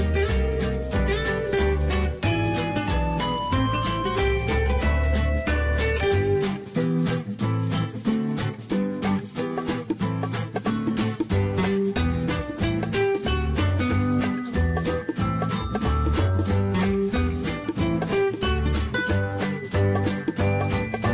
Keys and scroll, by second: 10.6-12.0 typing.